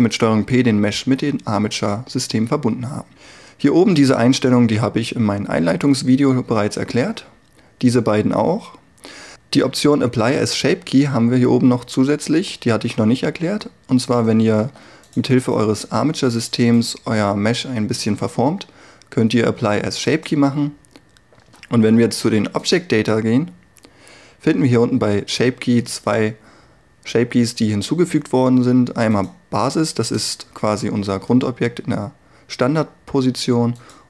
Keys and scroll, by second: 14.6 r, 30.2 Tab.